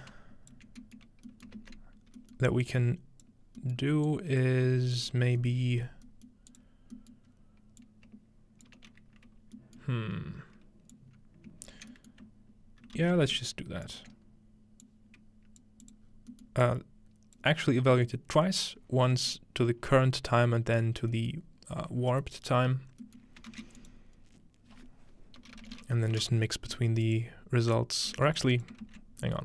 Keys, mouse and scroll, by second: 0.7-2.2 ctrl+scroll down 1, 1.6 ctrl+space, 2.7-3.3 ctrl+drag, 4.1 click, 4.7-9.8 drag, 4.7-5.1 scroll down 1, 4.7 typing, 5.7-8.7 scroll up 1, 8.7-9.2 scroll up 1, 9.2-10.7 scroll down 1, 9.6-10.7 middle drag, 10.9-13.5 drag, 11.9-13.0 scroll down 1, 13.0-13.4 shift+scroll down 1, 13.0 shift+d, 13.9 click, 14.8 click, 16.1 click, 16.1-17.4 scroll down 2, 16.3-17.9 middle drag, 17.4-17.9 scroll down 1, 17.9-18.7 drag, 18.1-19.2 middle drag, 18.7-21.1 scroll up 2, 23.5 shift+a, 23.8 click, 25.5-26.6 typing, 27.1 click, 28.3 click, 28.5 click, 28.8 ctrl+x.